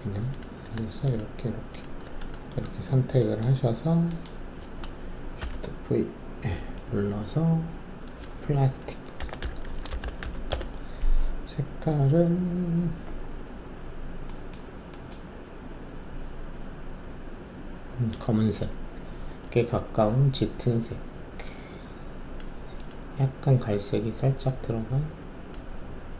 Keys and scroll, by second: 5.4 alt+shift+v, 9.1-10.2 typing, 10.4 Return.